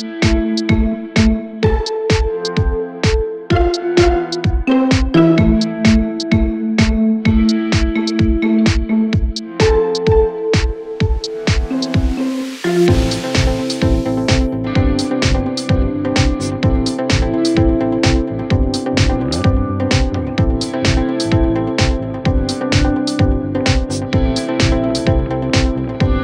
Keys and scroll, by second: 15.9 4, 23.1 3.